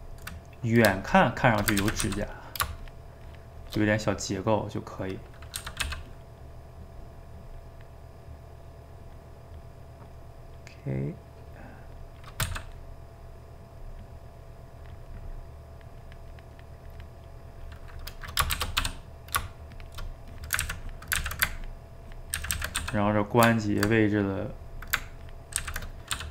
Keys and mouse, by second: 1.1 shift+click, 1.8 ctrl+z, 2.0 f, 2.4 middle click, 2.8-4.0 shift+drag, 4.0-5.6 middle drag, 5.6 g, 5.8 f, 6.3 middle click, 6.7 click, 7.6 middle click, 8.3 click, 9.2-10.8 middle drag, 10.8-12.5 drag, 12.5 f, 13.2-18.5 drag, 18.5 shift+c, 18.8 f, 20.3 click, 20.6 ctrl+z, 20.9 click, 21.2 ctrl+z, 21.6 ctrl+click, 22.4 ctrl+z, 22.5 ctrl+z, 22.8 f, 23.6-25.6 ctrl+drag, 25.6 ctrl+z, 26.2 f.